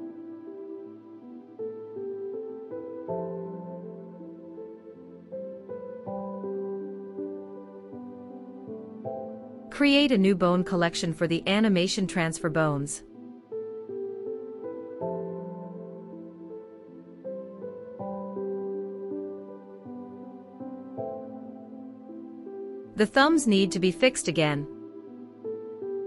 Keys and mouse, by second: 4.2 F3, 6.2 l, 16.1-16.7 shift+middle drag, 17.9-20.2 middle drag, 20.2-21.2 drag, 21.2 middle click, 21.2 KP_Decimal, 21.4 middle click, 22.0 middle click, 22.5 middle click, 22.7 click, 22.7 middle drag, 23.0 click, 23.1 middle click, 25.1-26.0 middle drag.